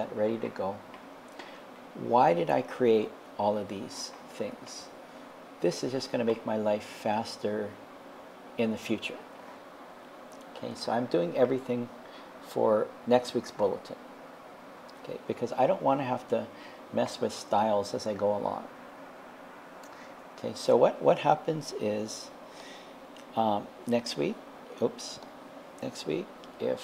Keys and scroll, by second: 24.1 1.